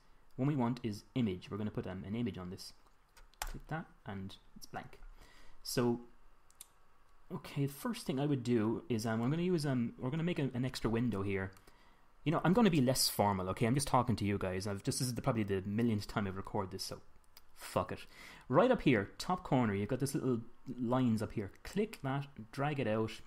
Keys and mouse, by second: 22.2-23.2 drag.